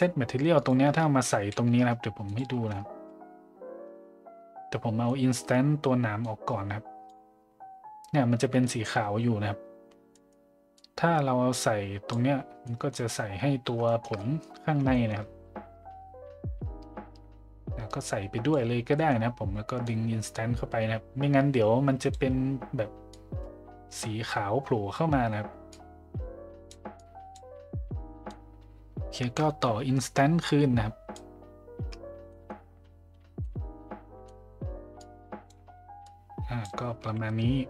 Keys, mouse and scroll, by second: 0.5 click, 1.3 shift+d, 5.0 middle drag, 6.2-7.1 drag, 8.6 middle click, 10.2 middle click, 10.7-12.1 drag, 12.6 middle drag, 13.8 shift+middle drag, 14.1 middle drag, 14.9 shift+middle drag, 18.1-18.5 drag, 18.9 middle drag, 19.9-22.1 drag, 23.2-24.0 drag, 25.8-26.7 drag, 27.0 click, 28.3-31.2 drag, 32.3 middle click, 33.5 middle click, 35.0-35.5 drag, 36.1 click.